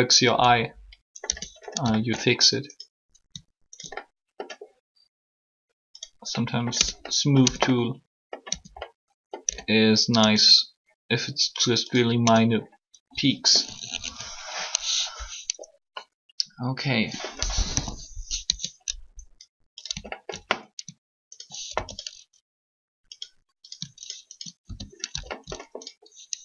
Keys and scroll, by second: 1.3 Tab, 6.7 Tab, 7.4 Tab, 8.5 Tab, 9.4 Tab, 12.2 Tab, 17.6 3, 18.5 Tab.